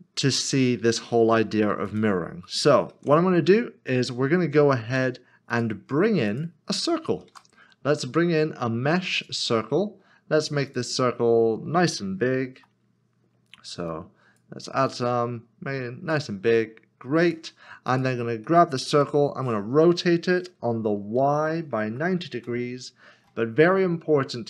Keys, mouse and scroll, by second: 1.8 click, 2.9 ctrl+z, 5.5 click, 6.7 s, 7.3 a, 9.1 click, 12.5 click, 17.2 click, 18.9-19.7 typing, 21.2-22.0 typing, 22.3 Return.